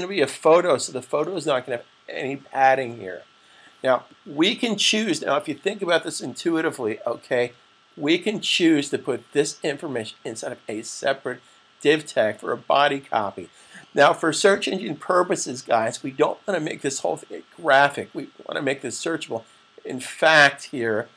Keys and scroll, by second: 2.6 super+s.